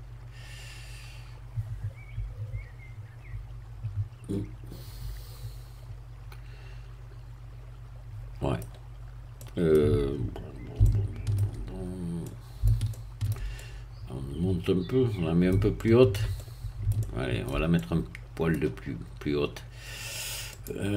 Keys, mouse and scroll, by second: 8.9 scroll up 1, 9.4 middle click, 10.8 shift+middle click, 11.8-12.1 shift+scroll up 1, 12.2-13.5 middle drag, 13.5-15.7 shift+middle drag, 15.7-20.5 shift+middle drag, 20.5-20.9 drag.